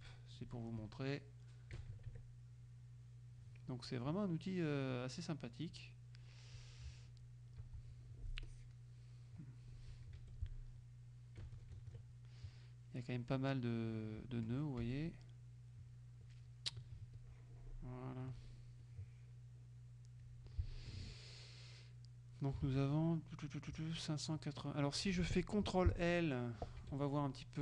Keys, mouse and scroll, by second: 1.8 KP_Subtract, 3.1 middle click, 3.9 middle click, 4.9 middle click, 5.6-6.7 middle drag, 7.7 z, 8.5 click, 9.5 click, 10.0 middle click, 10.2 F2, 11.5 KP_Subtract, 12.8 middle click, 14.9 F1, 15.4 middle click, 17.3-18.4 ctrl+drag, 18.9-20.5 drag, 21.1 F2, 22.7 ctrl+a, 26.9 F2.